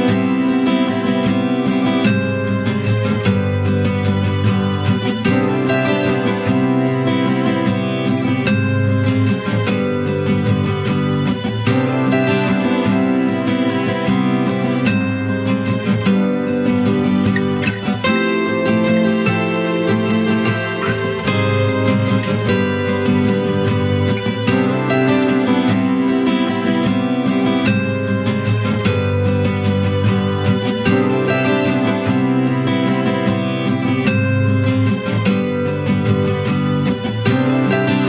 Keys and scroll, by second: 5.2 ctrl+i.